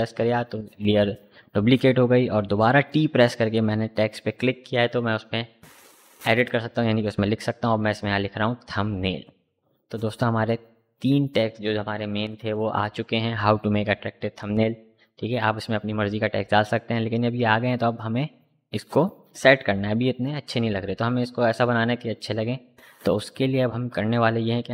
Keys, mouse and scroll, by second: 1.1 click, 2.7 ctrl+a, 5.2-6.7 typing, 8.5 shift+i, 10.6 click, 23.3 click.